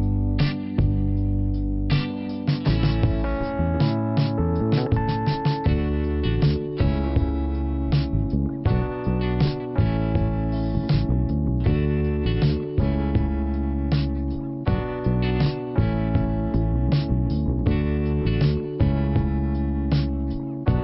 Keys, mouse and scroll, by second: 1.1 click, 1.4 click, 1.5 double click, 1.8 double click, 2.6 click, 5.2 click, 7.9 click, 14.3 click, 16.1 click, 17.0 click, 18.2 middle click, 18.6-19.5 scroll up 1, 20.3 click.